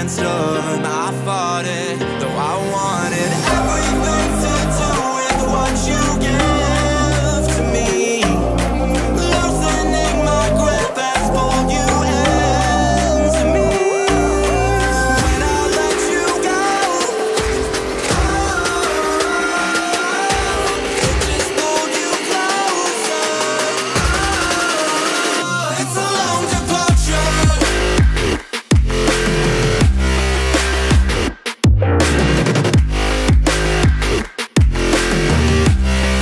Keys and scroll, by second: 0.6 ctrl+z.